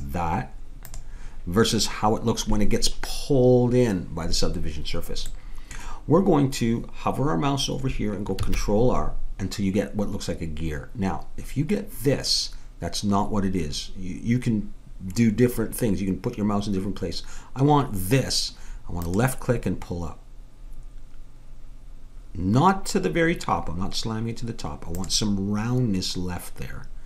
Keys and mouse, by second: 5.4-8.2 middle drag, 8.4 ctrl+r.